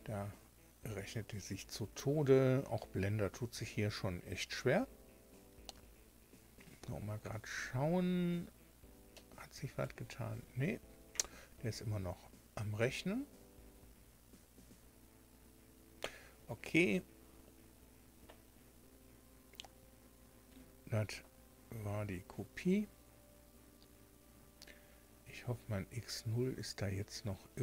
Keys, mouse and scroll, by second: 9.0 click.